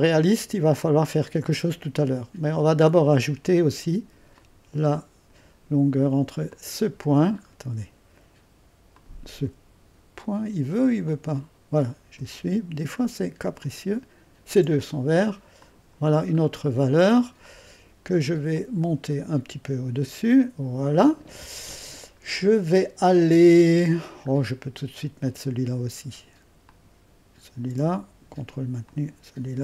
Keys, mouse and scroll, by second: 0.7-2.8 drag, 2.8-4.2 scroll up 1, 4.2 scroll up 1, 4.4-7.4 drag, 7.4-8.2 scroll up 2, 9.0-12.2 drag, 13.7-15.1 drag, 15.7 click, 16.4-17.8 middle drag, 16.4-17.8 scroll down 1, 17.8 click, 18.6-23.6 drag, 24.3-26.7 scroll up 1, 26.7-27.9 drag, 27.9 ⌨, 28.9-29.6 drag.